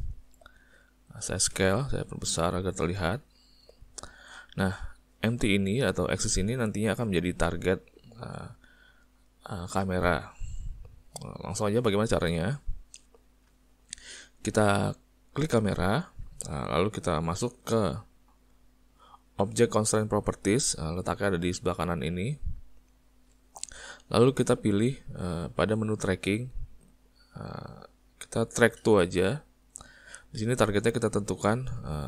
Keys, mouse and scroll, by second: 5.2 click, 12.5 ctrl+middle click, 15.5 click, 31.4 click.